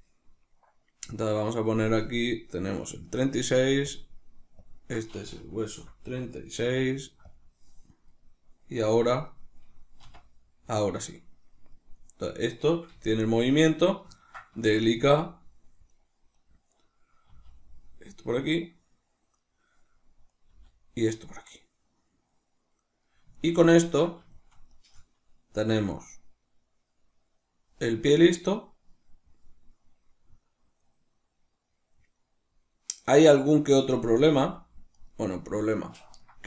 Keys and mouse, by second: 2.2 right click, 2.9 right click, 7.8 click, 8.0 right click, 9.2 right click, 9.9 r, 12.1 right click, 12.8 g, 13.9 right click, 14.1-15.9 ctrl+middle drag, 14.8 g, 16.2 right click, 17.2 r, 19.4 right click, 20.2 right click, 20.4 g, 23.0 right click, 23.3-24.6 ctrl+middle drag, 24.6 right click, 25.6 r, 34.1 right click, 34.3 g, 34.9 right click, 35.3-36.4 ctrl+middle drag.